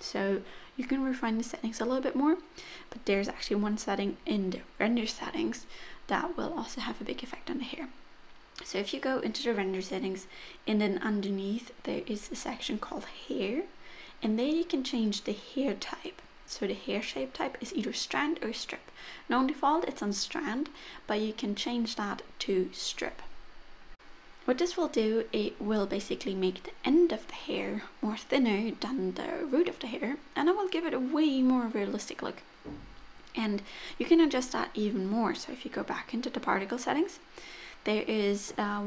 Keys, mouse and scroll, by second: 0.0-1.5 scroll up 2, 1.5-2.2 scroll up 2, 2.2-2.9 scroll down 1, 2.9 click, 5.3-7.5 scroll down 8, 7.5 click, 11.6 click, 14.4 scroll down 1, 15.2 click, 16.0 click, 18.0 click, 19.2 middle click, 21.0 middle click, 24.4 click, 24.9 click, 25.7 middle click, 28.2 scroll up 1, 29.4 middle click, 30.9-31.9 scroll down 4, 31.9 middle click, 31.9-32.4 scroll down 3, 32.9-34.3 scroll up 7, 34.3 click, 35.3 click, 36.3-37.7 scroll down 13, 37.7-38.4 scroll down 2, 38.4-38.8 scroll down 4.